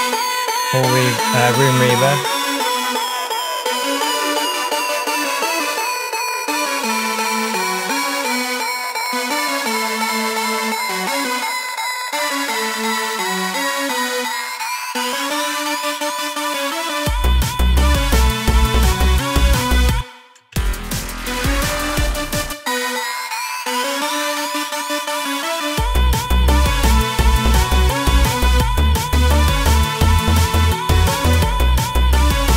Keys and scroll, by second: 20.0 space, 22.5 space.